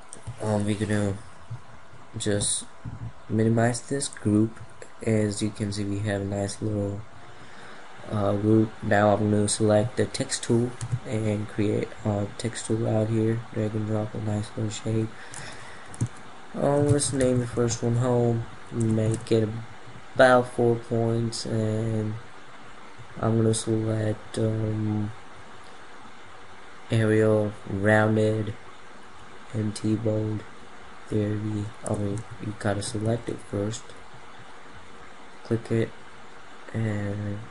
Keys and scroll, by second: 18.6 ctrl+a.